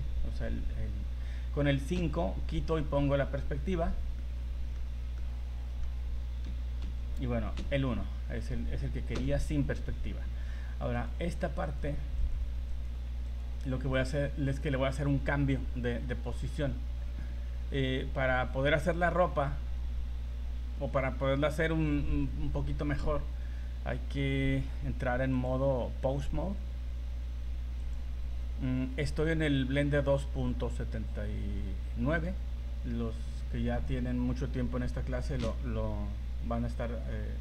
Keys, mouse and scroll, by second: 1.9 KP_5, 3.0-3.9 scroll down 5, 4.3 middle click, 5.0 scroll up 3, 5.4 middle click, 5.5 middle click, 6.4 KP_5, 6.8 KP_5, 7.6 KP_1, 9.1 KP_5, 11.1 right click, 11.8 right click, 12.4 right click, 12.9 right click, 13.5 right click, 14.2 right click, 25.3 click, 33.9 right click, 37.2 r.